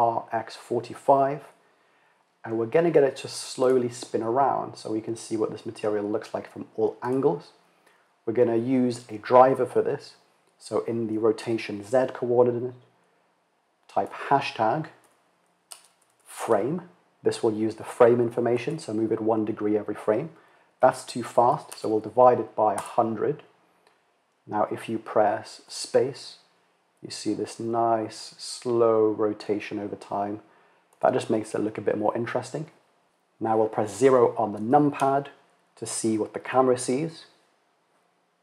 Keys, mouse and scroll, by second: 6.5-22.8 drag, 21.6 KP_0, 25.1 space, 30.5 space, 34.6 KP_0.